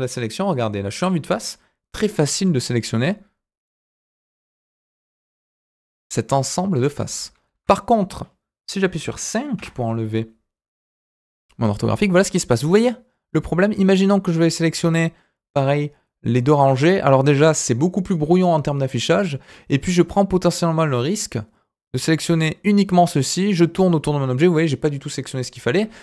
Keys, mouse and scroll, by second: 3.0 click, 4.4 scroll down 1, 4.6-6.7 middle drag, 7.5 KP_1, 8.2-9.5 scroll up 1, 9.5 KP_5, 13.4 click, 19.1-22.1 drag, 22.5-22.9 scroll down 1, 22.9-25.1 middle drag.